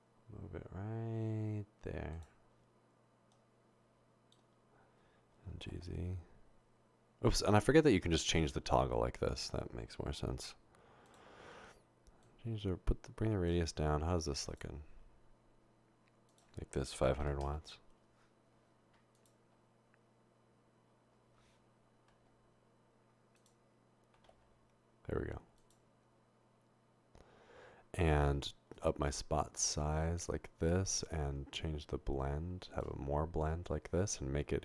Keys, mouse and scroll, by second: 5.7 typing, 8.1 click, 12.2-13.5 drag, 16.3 click, 17.3 typing, 17.6 Return, 19.2 click, 20.5 typing, 22.3 typing, 23.4 click, 24.1 typing, 28.8-30.2 drag, 31.1 click, 34.0 click.